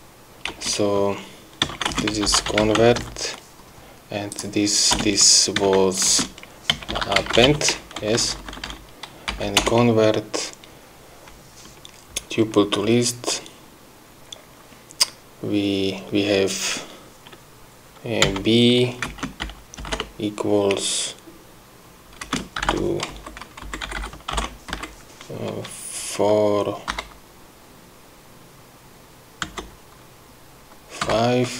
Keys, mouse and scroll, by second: 0.2 Return, 0.9 Return, 2.3-3.9 typing, 4.7 click, 5.3 Return, 6.5-8.4 typing, 8.4 Down, 9.7 End, 10.0 Return, 18.7 b, 19.5 space, 19.8 =, 20.2 BackSpace, 22.6 space, 23.5 shift+Left, 24.3 shift+Delete, 25.1 shift+Left, 27.3 4, 31.4 5.